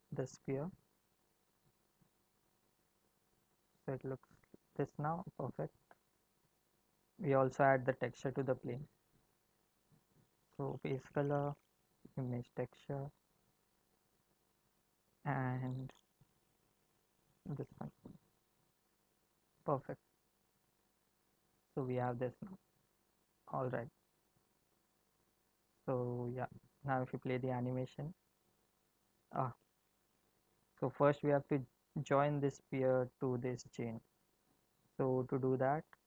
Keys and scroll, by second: 27.5 space, 29.0 space.